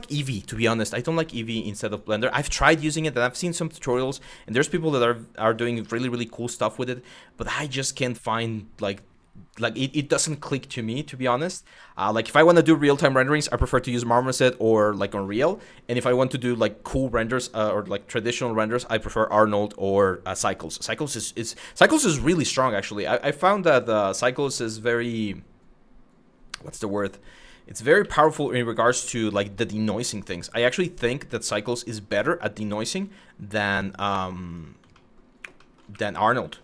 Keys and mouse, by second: 0.3 shift+middle click, 1.5 click, 2.3 click, 3.5 shift+middle click, 4.4 shift+middle click, 5.2 click, 5.6 shift+middle click, 26.6 1, 27.6 w, 27.9 1, 29.8 e, 31.3 click, 31.5 e, 32.2 click, 33.3 click, 34.1 click, 35.3 middle click, 35.5 2, 36.4 KP_1.